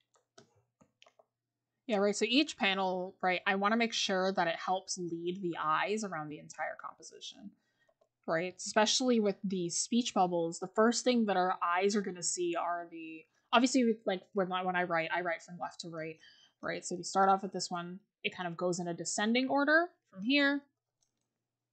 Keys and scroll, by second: 7.9-8.4 scroll up 1, 8.4-10.1 scroll down 1, 11.0 scroll up 1.